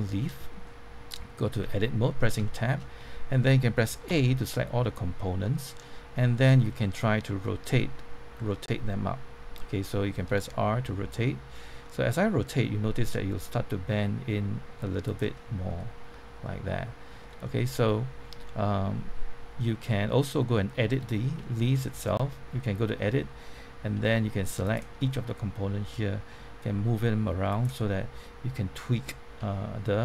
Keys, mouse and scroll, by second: 1.6 Tab, 2.1 scroll up 1, 2.4 shift+middle click, 4.0 a, 5.4-10.2 middle drag, 10.7 r, 15.0 click, 15.3-21.2 middle drag, 21.7 Tab, 22.2 middle click, 22.5 Tab, 24.6 alt+click, 25.0-26.2 middle drag, 26.6 g, 27.4 click, 29.4 1.